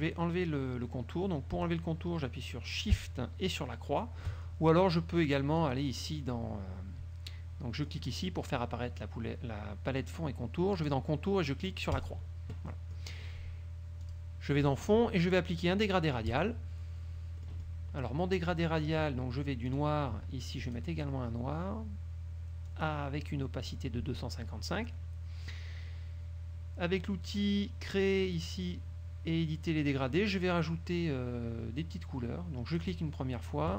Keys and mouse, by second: 5.7 click, 8.0 click, 10.9 click, 12.1 click, 12.9 click, 14.2 click, 16.4 click, 17.5 click, 19.8 click, 20.8 click, 22.8 click, 28.0 click, 30.7 middle click, 32.8 click.